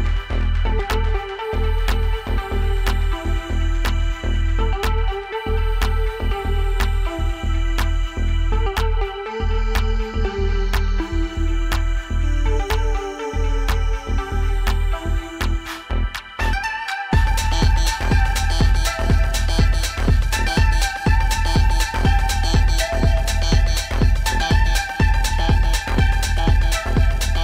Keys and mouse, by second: 2.9 click, 5.0 alt+click, 5.6 alt+click, 10.9-12.1 alt+drag, 13.0-14.8 alt+drag, 19.1 click, 19.9 click, 20.1-21.5 shift+drag, 23.6 click, 27.0 click.